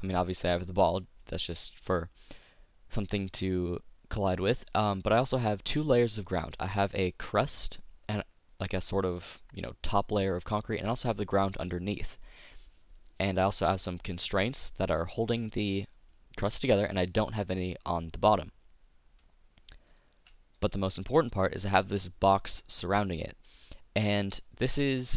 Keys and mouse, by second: 5.8-10.8 middle drag, 12.1-23.6 middle drag.